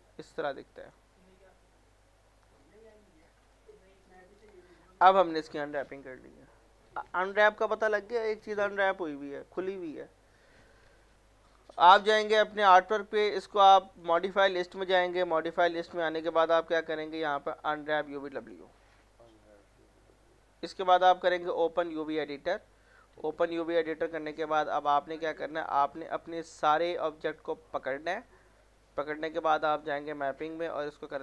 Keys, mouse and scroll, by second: 0.8 click, 2.4 right click, 4.0 click, 5.0 alt+middle click, 11.7 click, 16.8 u, 18.4 click, 21.5 click, 24.4 click, 25.0-25.5 scroll down 1, 25.5-27.3 drag, 28.1 middle click, 29.6 click.